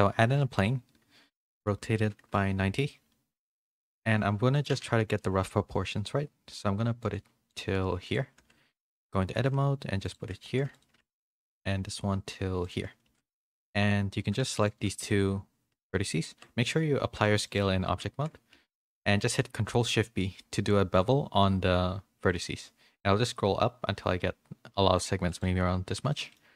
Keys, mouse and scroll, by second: 0.3 r, 4.0 s, 4.0 g, 4.7 z, 5.4 s, 7.1 g, 7.6 s, 8.4 Tab, 8.7 2, 9.0 click, 9.2 g, 10.4 2, 10.9 g, 13.0 2, 13.3 1, 14.6 shift+click, 17.0 Tab, 17.0 ctrl+a, 17.9 Tab, 19.1 ctrl+shift+b, 26.2 middle click, 26.2 z.